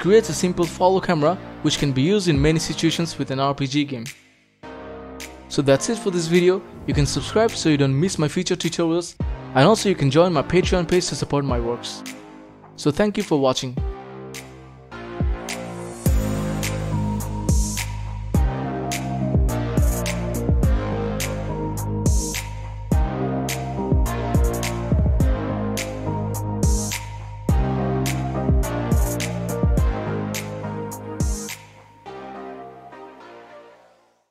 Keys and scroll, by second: 0.8-9.5 typing, 12.4-14.2 typing, 15.4 s, 15.8 d, 17.1 space, 17.7 w, 18.1 a, 19.3 w, 20.6 d, 23.9-26.0 typing, 28.4 a, 29.1 w, 29.5 s, 30.2 d, 33.3 d.